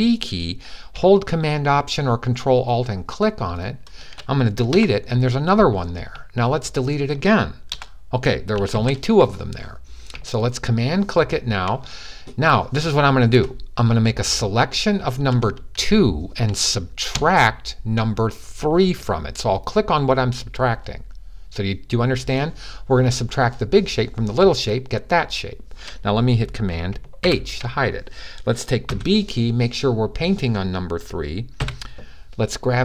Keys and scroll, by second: 8.5 super+z, 26.9 super+h, 28.6 super+b, 31.4 b.